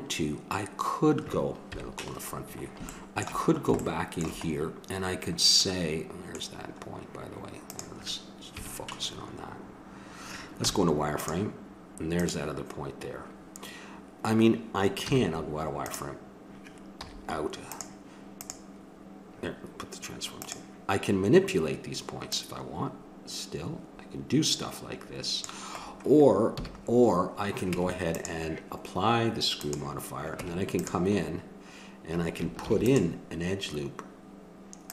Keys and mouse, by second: 1.7 KP_1, 7.7 click, 8.5 KP_Decimal, 10.6 z, 15.1 z, 17.0 z, 18.3-20.1 drag, 20.4-22.3 drag, 22.4-24.1 drag, 25.8-27.3 middle drag, 26.5 a, 27.7 Tab, 29.6-31.3 drag, 30.4 Tab, 32.6 ctrl+r.